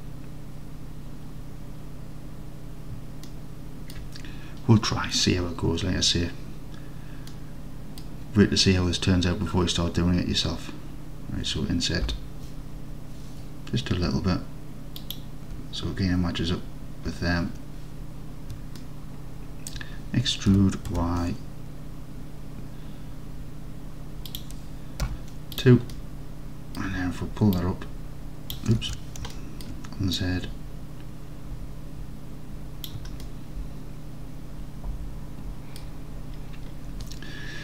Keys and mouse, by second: 3.3 alt+click, 7.4 click, 12.2 i, 15.0 shift+click, 19.0 alt+click, 20.6 e, 21.0 y, 24.4 click, 25.1 2, 25.6 click, 26.0 alt+click, 27.6-28.6 drag, 28.9 ctrl+z, 29.4 alt+click, 30.2 click, 33.3-35.8 alt+drag.